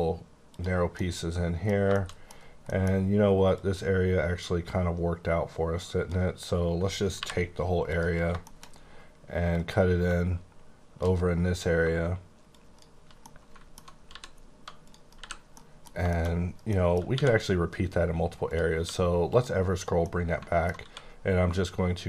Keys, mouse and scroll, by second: 0.5 click, 0.8 scroll down 2, 0.9 middle click, 1.6 scroll down 2, 1.9 shift+middle click, 2.2 middle click, 2.4-3.5 scroll up 4, 2.6 middle click, 3.5 click, 7.1 y, 7.8 click, 8.1 scroll down 4, 8.4 shift+middle click, 8.7-9.5 scroll up 1, 9.5 click, 13.2 middle click, 14.0 g, 14.8 click, 15.1 h, 15.3 scroll down 2, 15.5 middle click, 17.1 q, 18.4 click, 18.7 q, 19.2 click, 19.7 click, 20.0 middle click, 20.8 q.